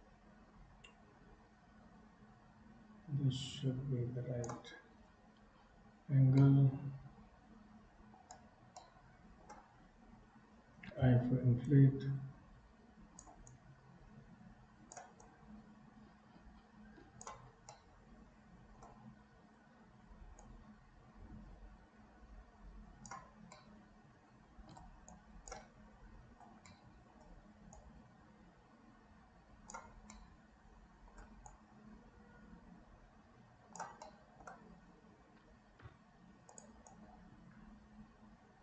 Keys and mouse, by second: 6.5-8.2 middle drag, 8.8 middle click, 11.8-13.2 drag, 13.5-15.0 drag, 15.3-17.3 drag, 17.9-19.0 middle drag, 20.5-23.1 drag, 23.7-24.7 middle drag, 25.3 shift+click, 26.7 middle click, 27.8-29.8 right drag, 30.2 middle click, 31.5-33.9 shift+right drag, 34.2 middle click, 35.8 f, 36.9-38.6 drag.